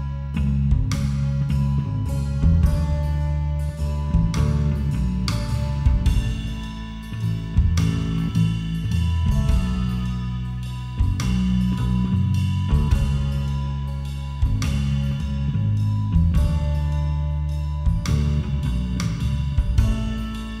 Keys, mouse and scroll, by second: 0.2 right click, 1.0 middle click, 1.3-2.8 right drag, 1.9 a, 2.9-6.4 right drag, 6.4-8.6 middle drag, 7.6 g, 9.5-10.9 right drag, 10.2 g, 13.3 a, 13.7-15.1 middle drag, 15.2-20.6 right drag.